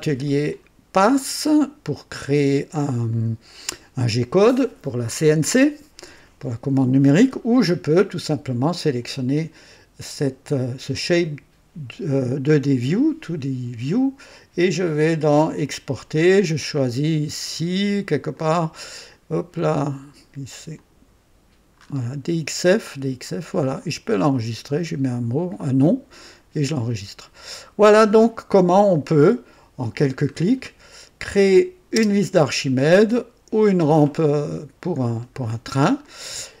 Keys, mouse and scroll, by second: 0.5 click, 3.1 click, 14.3 click, 15.6 click, 18.3 click, 20.7 click, 23.8 click, 27.2 click, 28.4-28.7 scroll down 1, 30.3 scroll up 1, 31.3 click, 32.0 space, 32.9-34.5 drag, 35.0 scroll up 1, 35.4-35.7 scroll down 1, 35.7 scroll up 1, 36.0 click.